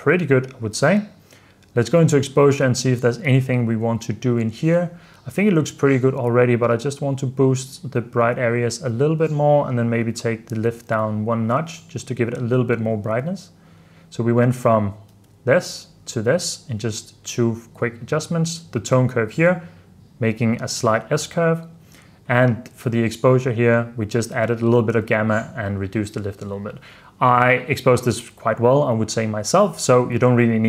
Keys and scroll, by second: 0.3 super+f, 1.0 super+s, 10.9 super+d, 13.4 super+d, 15.2 super+d.